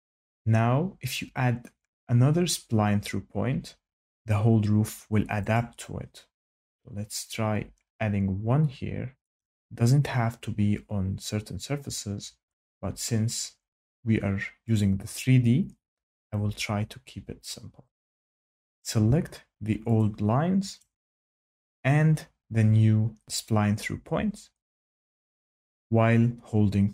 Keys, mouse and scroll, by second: 5.5 click, 9.3 click, 14.7 click, 16.3 click, 17.0 Escape, 17.8 Escape, 18.6 click, 19.9 ctrl+click, 20.7 ctrl+click.